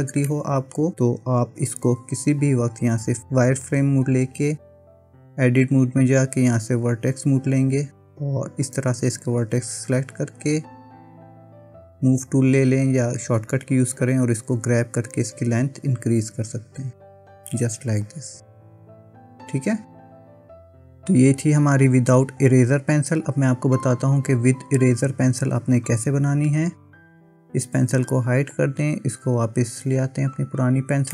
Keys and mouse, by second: 0.4 middle click, 1.5 KP_1, 5.4 Tab, 6.9 click, 8.7 click, 11.7 click, 14.2-16.3 drag, 17.1 Tab, 18.1 click, 19.3-21.0 middle drag, 26.4 click, 27.1 click, 28.0 click, 28.6 click, 30.5 click.